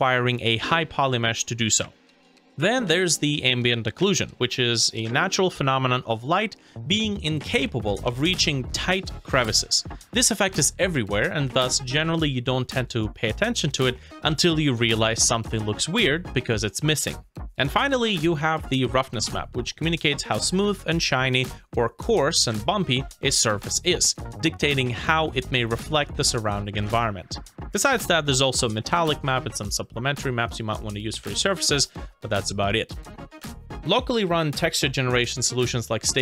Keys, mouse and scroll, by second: 0.3 scroll down 1, 0.7 middle click, 10.6 middle click, 15.2 scroll down 1, 15.9 middle click, 18.3 scroll up 1, 18.8 middle click, 31.3 scroll down 1, 32.0 scroll up 1.